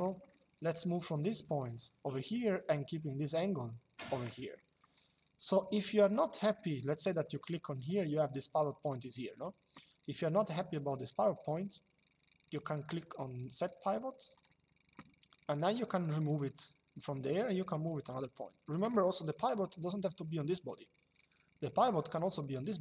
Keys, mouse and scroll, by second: 2.0 middle click, 4.2 middle click, 5.9 click, 14.0 click.